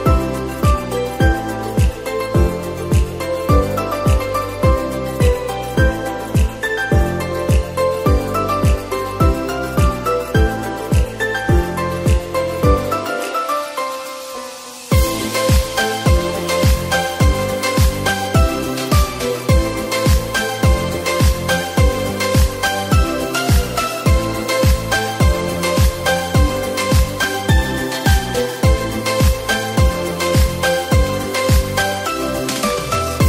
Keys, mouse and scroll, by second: 1.5 Tab, 2.0 click, 2.3 scroll down 2, 2.7-3.9 middle drag, 3.9 click, 5.7 shift+d, 8.7-9.8 middle drag, 9.8-10.4 scroll up 3, 10.4-11.9 middle drag, 11.9 click, 12.5-13.5 middle drag, 13.5-13.9 scroll down 2, 13.9-15.7 middle drag, 15.7 click, 16.5-25.3 drag, 25.4-26.6 middle drag, 26.6 KP_0, 28.6 click, 29.5 click, 30.2-30.7 scroll down 2, 30.7-31.2 shift+middle drag, 31.2-31.6 scroll down 1, 31.6-33.2 middle drag.